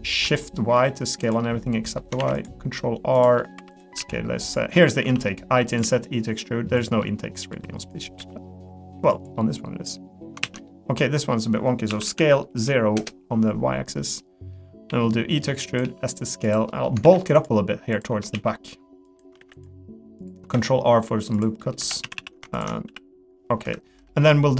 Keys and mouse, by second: 1.4 middle click, 2.2 ctrl+r, 3.4 middle click, 3.6 3, 4.0 s, 5.0 i, 5.8 e, 7.0 middle click, 7.5 3, 7.8 click, 8.2 e, 9.3 middle click, 10.4 ctrl+z, 10.7 middle click, 11.9 s, 14.2 click, 15.8 s, 16.7 click, 17.0 ctrl+r, 18.3 s, 19.4 ctrl+r, 20.5 s, 21.6 middle click, 21.8 3, 22.0 a, 22.5 ctrl+click, 22.9 s, 23.8 middle click.